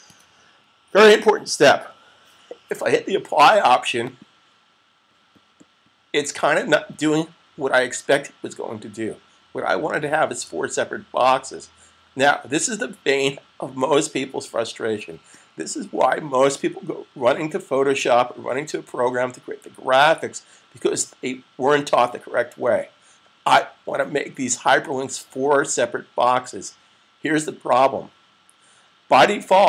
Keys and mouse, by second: 3.9 click.